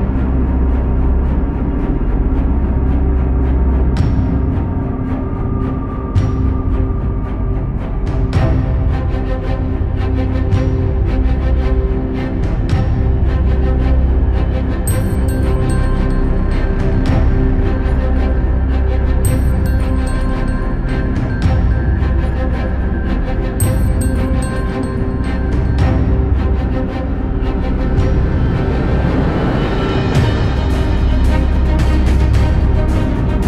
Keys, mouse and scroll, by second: 0.3 g, 1.4 s, 1.8 middle click, 3.4 middle click, 4.0-8.6 typing, 9.1 scroll down 1, 9.1-10.3 middle drag, 10.3 click, 10.6 middle click, 11.4 KP_7, 12.3 g, 13.2 r, 14.0 s, 15.1-16.3 middle drag, 16.3 KP_1, 18.6-19.8 middle drag, 19.8 s, 20.5 i, 22.3 e, 22.8 middle click, 23.3 scroll up 2, 23.5 middle click, 24.1-27.6 typing, 28.7-29.7 middle drag, 29.7 g, 30.9 click, 31.1 g, 32.9 ctrl+KP_Add, 33.1 ctrl+KP_Add.